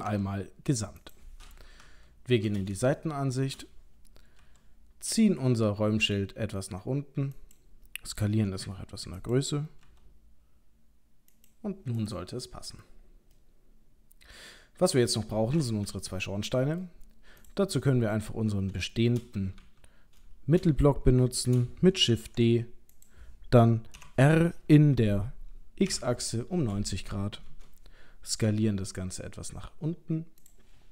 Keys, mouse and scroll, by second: 0.1 s, 1.7 KP_3, 3.0 shift+middle click, 4.4 g, 7.4 click, 8.5 s, 9.8 g, 12.0 click, 12.4 middle click, 13.0-13.5 scroll down 3, 13.4 middle click, 16.6 middle click, 17.4 click, 17.9 middle click, 19.0 shift+middle click, 19.6 KP_3, 20.3 shift+scroll up 1, 20.9 scroll up 1, 21.2 shift+middle click, 22.2 shift+d, 24.0 r, 28.5 s.